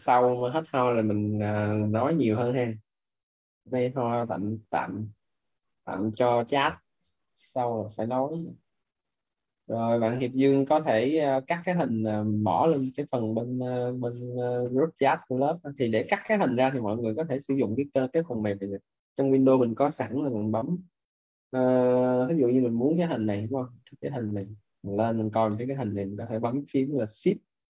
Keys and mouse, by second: 13.6 click, 17.1 click, 23.5 click, 24.8 middle click.